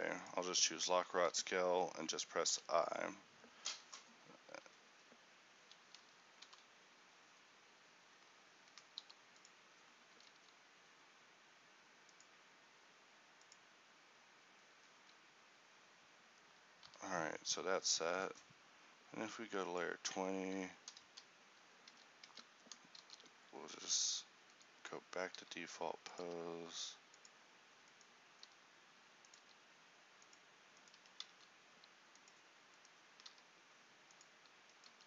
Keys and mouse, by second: 1.0 a, 1.3 a, 2.6 i, 4.8 a, 5.0 a, 6.5 i, 9.1 g, 10.2 a, 10.4 a, 14.0 click, 14.8 a, 15.1 a, 17.0 i, 21.2 Left, 22.0 a, 23.1 alt+g, 23.1 a, 23.9 alt+r, 25.5 r, 26.4 g, 28.6 r, 29.6 g, 31.0 g.